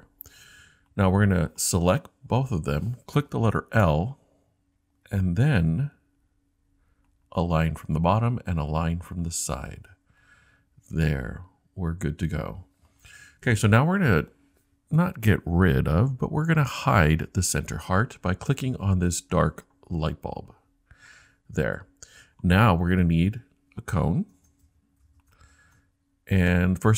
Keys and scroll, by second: 3.8 |.